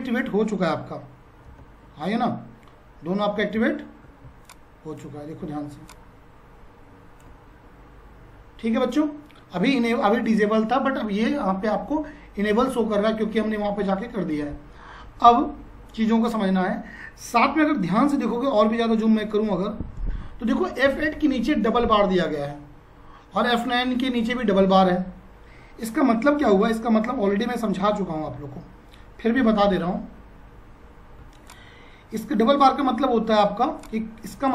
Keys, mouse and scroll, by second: 19.0-20.8 scroll up 1, 26.4 F5, 28.2 r, 31.2 Tab, 31.4 click, 31.7 Tab, 33.8 click, 33.9 Tab.